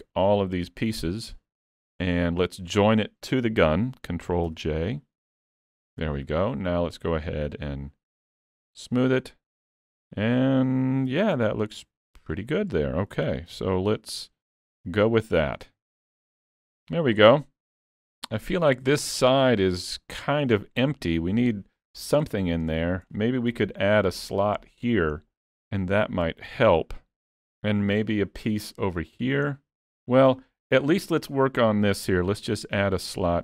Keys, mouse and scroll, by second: 0.2 shift+click, 1.7 middle click, 2.1 scroll down 2, 5.6 scroll up 1, 7.2 click, 9.7 middle click, 11.1 alt+a, 11.4-12.1 scroll down 3, 11.9 middle click, 13.3 shift+s, 15.1 click, 15.7 alt+a, 16.0-16.5 scroll down 5, 16.5 shift+middle click, 16.9 middle click, 18.8 scroll up 2, 19.1 shift+middle click, 19.6 middle click, 19.9 scroll up 2, 20.3 shift+middle click, 20.6 middle click, 22.0 scroll down 4, 22.4 shift+middle click, 22.9 scroll up 2, 23.1 shift+middle click, 25.3 scroll down 1, 27.8 shift+middle click, 28.3 scroll up 2, 28.7 shift+middle click, 29.5 scroll down 3, 29.9 shift+middle click, 30.5 scroll up 1, 30.9 shift+middle click, 32.0 middle click, 32.4 shift+middle click, 33.0 click.